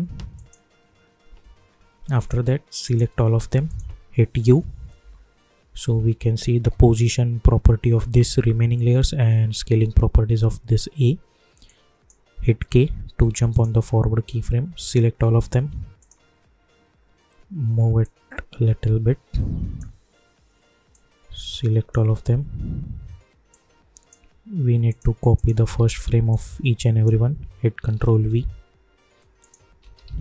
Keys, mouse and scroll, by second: 3.6 shift+click, 4.4 u, 5.0 u, 5.7 scroll down 1, 8.8 scroll up 1, 11.6 click, 12.6 k, 13.5 click, 15.2 scroll down 1, 16.0-24.9 shift+drag, 25.7 ctrl+c, 26.3-28.1 drag, 28.1 ctrl+v, 29.4 click, 29.8 ctrl+v, 30.0 ctrl+b.